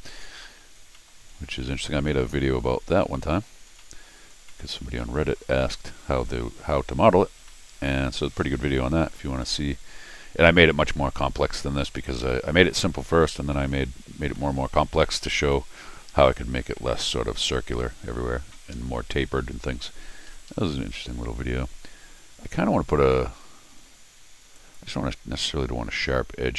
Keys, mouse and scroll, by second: 0.1 scroll down 1, 0.2 middle click, 0.8 middle click, 1.0 middle click, 1.5 middle click, 2.1 middle click, 2.3 middle click, 2.6 middle click, 3.1 middle click, 3.4 middle click, 3.7 scroll up 1, 3.8 middle click, 4.5 middle click, 5.0 middle click, 6.3 scroll up 1, 7.5 middle click, 8.0 middle click, 8.8 middle click, 9.4 middle click, 10.6 middle click, 11.6 middle click, 12.2 scroll down 1, 12.3 middle click, 12.9 scroll up 1, 13.5 middle click, 14.0 scroll up 1, 14.3 middle click, 15.0 middle click, 15.3 scroll down 1, 15.5-16.6 middle drag, 16.7 middle click, 17.4 scroll down 2, 17.6-18.7 scroll up 2, 18.7 Escape, 20.3 Escape, 20.7 Escape, 21.0 Escape, 24.5 click.